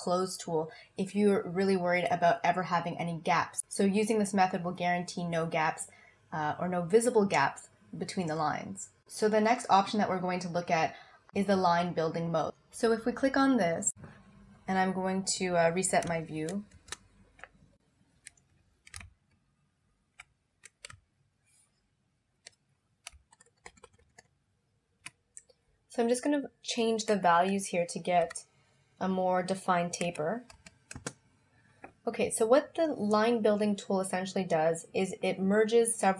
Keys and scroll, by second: 20.9 z, 23.7 super+=, 28.2 5, 30.1 3.